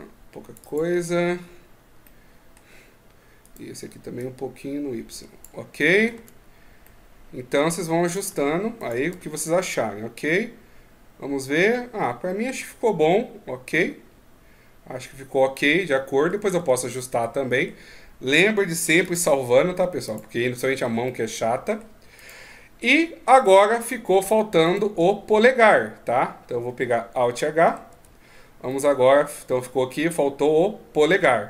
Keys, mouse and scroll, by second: 0.4 click, 0.9-1.5 scroll down 3, 1.8 middle click, 3.2 right click, 3.9 click, 5.5 middle click, 5.9 Tab, 6.6 middle click, 7.4 Tab, 7.8 right click, 8.0 Tab, 8.6 right click, 8.9 Tab, 9.2 middle click, 16.3 Tab, 17.0 middle click, 18.8 click, 20.4-20.8 scroll up 2, 20.8 middle click, 21.9 right click, 24.4 right click, 24.7 Tab, 27.7 alt+h, 28.4 middle click.